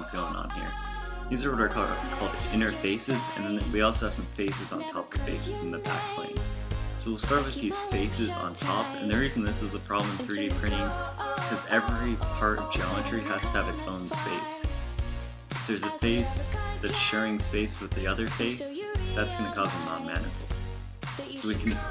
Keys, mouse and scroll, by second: 1.2 ctrl+alt+shift+m, 7.0 z, 9.5 g, 12.9 g, 15.5 a, 18.8 z, 20.1 x.